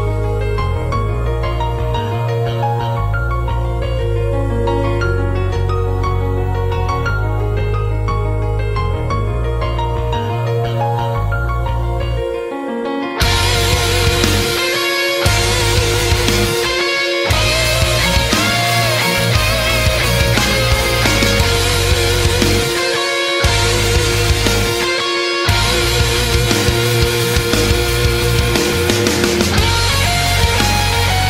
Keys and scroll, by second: 0.5 space, 1.9 space, 2.1 space, 3.3 space, 4.2 space, 5.5 ctrl+z, 7.7 space, 7.9 ctrl+z, 8.2 ctrl+z, 8.9 space, 9.4 space, 15.9 space, 17.6 space, 18.8 ctrl+z, 23.5 space, 24.2 ctrl+z, 27.7 space.